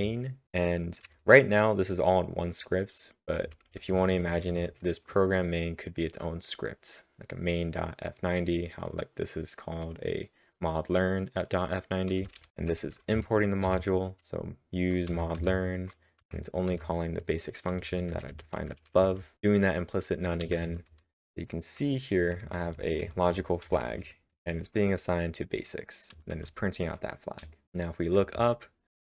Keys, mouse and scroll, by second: 0.2-1.0 typing, 3.8-4.6 typing, 12.2-13.3 typing, 17.8-19.3 typing, 20.9-23.7 typing, 27.4-29.0 typing.